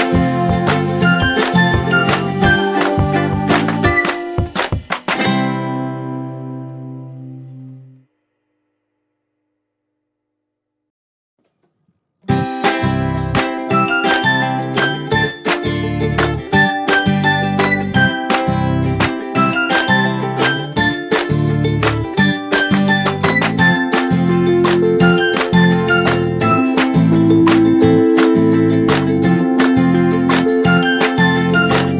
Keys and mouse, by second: 2.4 Up, 4.8 click, 6.6 right click, 7.9 click, 9.5 click, 13.1 click, 19.3 click, 22.7 click, 25.2 click, 26.7 shift+click, 28.0 click, 29.8 click.